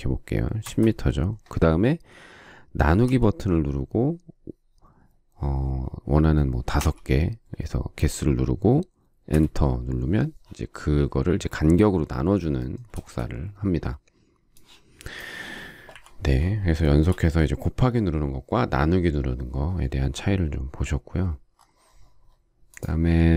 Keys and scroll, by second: 0.6 Return, 6.7 5, 9.3 Return, 12.8 space, 15.9 Delete.